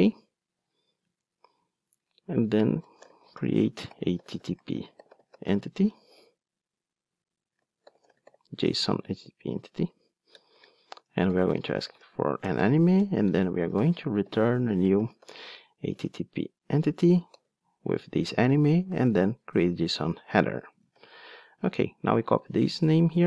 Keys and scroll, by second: 1.3 Return, 12.4 Return, 20.8 alt+super+l, 22.4 super+c.